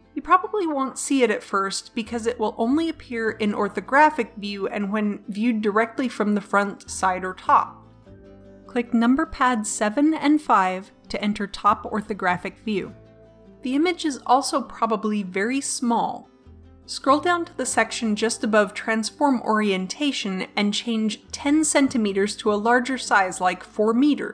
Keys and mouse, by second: 8.4 KP_7, 9.6 KP_5, 18.8-23.0 middle drag.